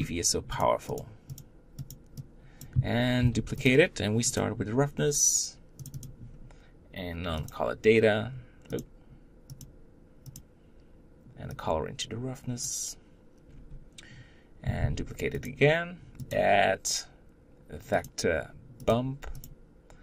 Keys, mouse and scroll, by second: 1.5-3.0 drag, 3.0 shift+d, 4.2-14.5 drag, 14.5 shift+d, 16.7-20.0 drag.